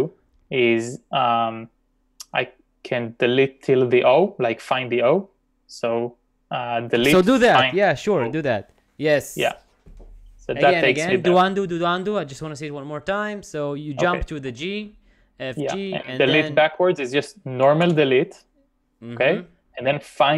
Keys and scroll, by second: 6.8-8.4 typing, 12.1 u, 14.3-15.0 typing, 17.9 d.